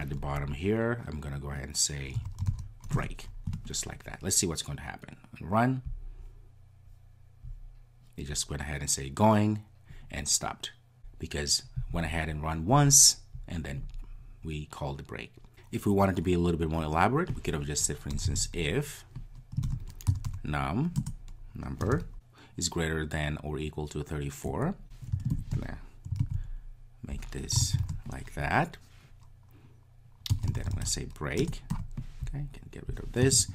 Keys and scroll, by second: 3.0 Return, 5.9 ctrl+r, 21.0 Return, 26.3 super+x, 31.4 super+v.